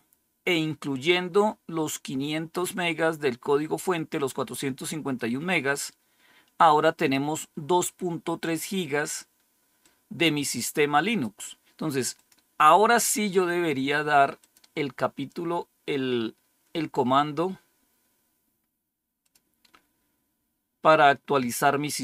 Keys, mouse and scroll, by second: 4.0-12.8 drag, 14.3 click, 15.9-18.0 scroll down 2, 19.1 click, 20.4-22.0 scroll down 1.